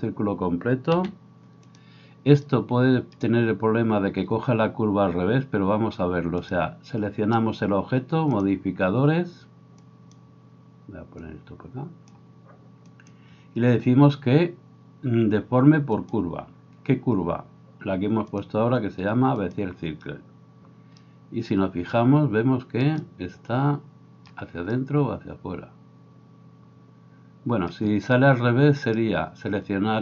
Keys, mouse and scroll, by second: 1.0 s, 1.8-6.5 middle drag, 6.5 right drag, 6.6-9.8 middle drag, 9.8-30.0 drag, 28.8 right click.